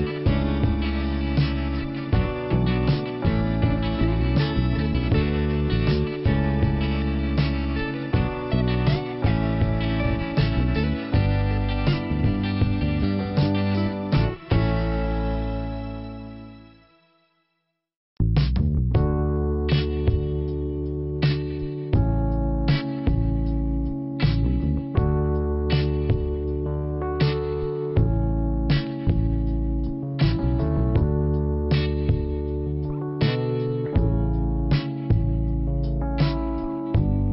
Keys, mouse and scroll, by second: 2.6 click, 3.9 scroll up 1, 5.0 click, 6.2 click, 11.3 click, 11.6 click, 12.1 double click, 12.4 double click, 18.0 click, 23.6 click, 25.0 click, 25.5 scroll down 1, 26.9 click, 27.8 click, 29.6 click, 32.0 click, 33.5 click, 34.8 click, 36.8 middle click.